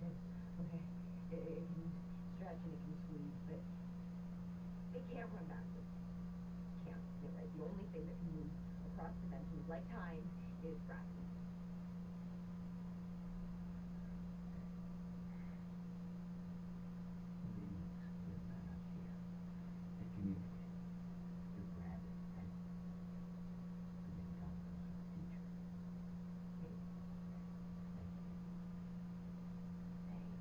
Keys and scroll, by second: 0.5 Down, 1.1 Down, 23.5 Left, 25.2 Down, 26.2 Up.